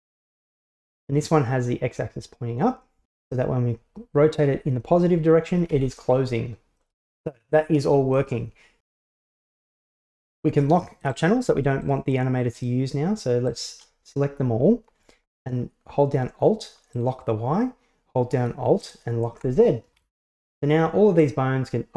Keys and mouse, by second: 3.4-6.0 drag, 6.8-7.6 middle drag, 8.2-9.7 middle drag, 11.1 right click, 11.9 shift+right click, 12.6 shift+right click, 13.5 shift+right click, 17.0 alt+click, 18.9 alt+click, 20.0-21.3 right drag.